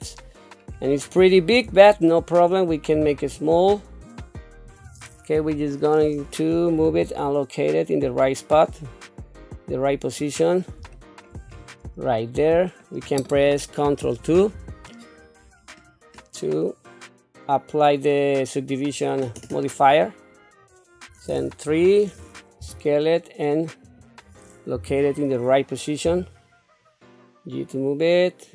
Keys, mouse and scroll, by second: 0.7-1.3 scroll up 2, 1.8 shift+middle click, 2.9 s, 5.4 KP_3, 6.8 g, 10.9 shift+middle click, 11.4 scroll up 3, 12.0 shift+middle click, 14.4 ctrl+2, 16.5-19.2 middle drag, 21.6 KP_3, 22.6 s, 24.7 KP_7, 26.0 g.